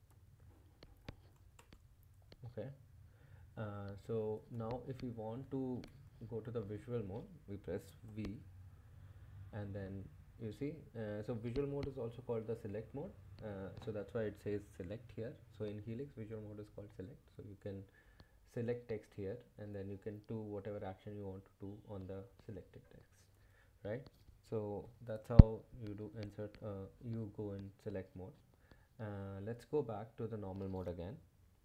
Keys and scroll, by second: 0.0-1.9 typing, 0.9 Escape, 4.5 Escape, 4.8 Left, 5.9 ⟲, 8.1 v, 9.4-10.6 typing, 17.2 Left, 17.4 Left, 17.6 Left, 17.8 Left, 18.1 Left, 18.4 Left, 18.7 Left, 18.9 Left, 19.5 BackSpace, 29.9 Escape.